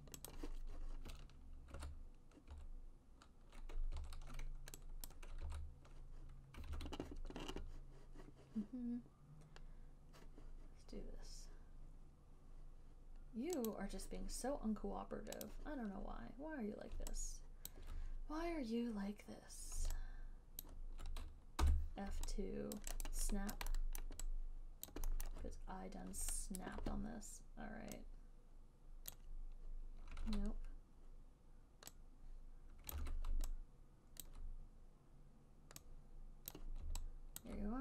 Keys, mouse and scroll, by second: 0.6 click, 2.0 ctrl+u, 2.8 ctrl+u, 4.2 ctrl+u, 5.3 click, 5.8 ctrl+u, 7.0 ctrl+z, 14.0 click, 15.9 click, 18.0 alt+click, 21.0 click, 21.9 f, 23.0 alt+click, 23.4 alt+right click, 23.9 alt+click, 24.3 alt+middle click, 25.2 alt+click, 25.5 alt+middle click, 26.9 alt+right click, 29.5 click, 30.6 ctrl+z, 33.4 ctrl+z, 34.5 alt+click, 36.8 click, 37.7 alt+click.